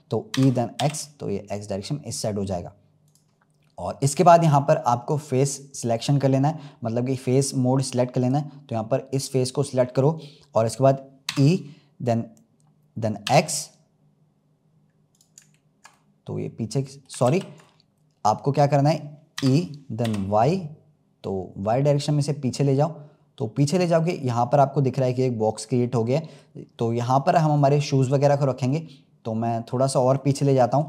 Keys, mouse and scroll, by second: 0.3 e, 8.1-9.2 drag, 11.2 e, 15.9-17.2 middle drag, 17.2 ctrl+z, 17.6-19.3 middle drag, 19.3 e, 23.9-26.6 middle drag, 26.6-27.1 scroll up 6, 27.1 middle click, 28.1-28.7 scroll down 5, 28.7-30.8 middle drag.